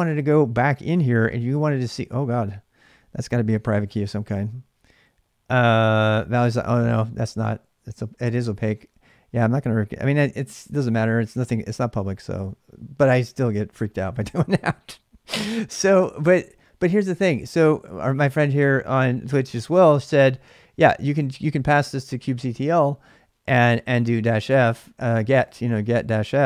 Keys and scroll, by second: 2.8-3.4 k, 15.6 ctrl+[, 15.7 k, 17.1 shift+a, 19.5 BackSpace, 19.7 BackSpace, 21.1 k, 21.6 space, 23.7-26.4 typing.